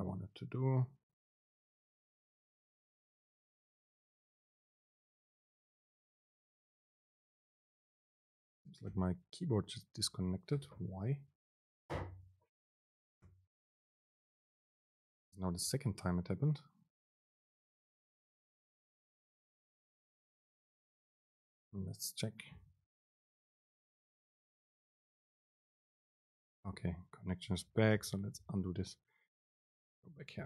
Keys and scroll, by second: 27.0 Up, 27.3 Down, 28.4 super+z, 30.3 End.